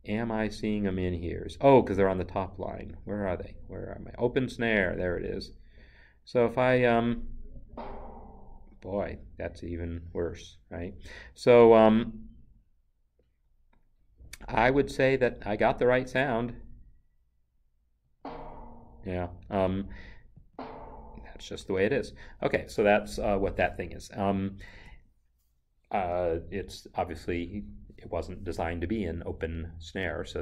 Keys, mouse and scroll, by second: 0.1 click, 8.4 double click, 18.0 click, 18.2 double click, 20.4 click, 20.5 double click, 24.7 Escape.